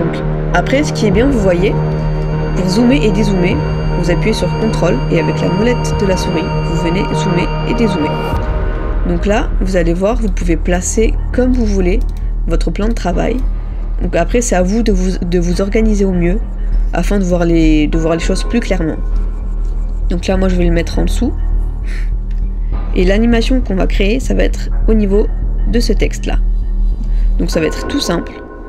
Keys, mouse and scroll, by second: 5.6 ctrl+scroll down 1, 6.8 ctrl+scroll down 1, 6.8-7.8 ctrl+scroll up 1, 7.8-8.3 ctrl+scroll down 1, 8.5 ctrl+scroll down 1, 8.5-8.8 ctrl+scroll up 1, 28.4-28.6 ctrl+scroll up 1.